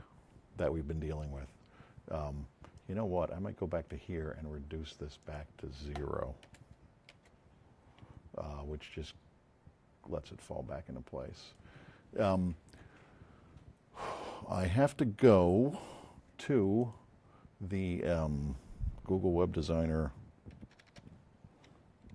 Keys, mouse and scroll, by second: 2.7-3.9 drag, 5.2 click, 6.5 KP_0, 7.0 KP_Enter, 8.8-11.5 drag, 16.7 click, 20.4 g, 20.8 o.